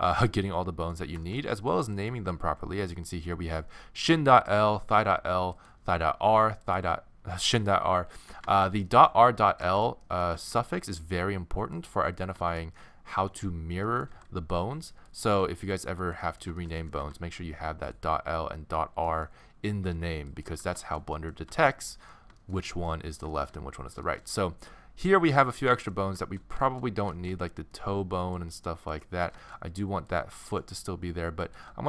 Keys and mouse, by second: 3.6-6.5 right drag, 6.5-8.2 drag, 8.2-10.4 middle drag, 13.0 middle click, 14.1 g, 15.1 click, 16.0 right click, 17.0 g, 21.2 middle click, 25.5-31.8 middle drag.